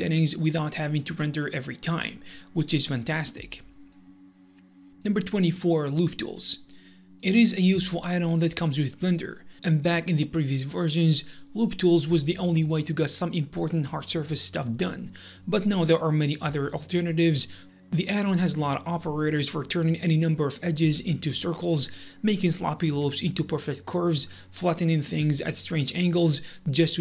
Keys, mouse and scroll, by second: 4.5 middle click, 4.7 click, 6.1 click, 6.7 click, 8.1 click, 9.1-10.5 drag, 10.7 middle click, 10.9 c, 12.8 right click, 13.6 click, 15.9 3, 16.3 c, 17.0 right click, 17.2 i, 17.6 middle click, 17.7 e, 17.9 click, 18.0-20.6 middle drag, 20.3 Tab, 20.5 Delete, 20.6 click, 20.6 g, 20.7 middle click, 21.0 a, 21.5 click, 21.7-23.0 middle drag, 23.1-23.9 drag, 23.9 shift+a, 24.5 Tab, 24.8 shift+d, 25.0 click, 25.1 middle click, 25.9 click, 26.1-27.0 middle drag.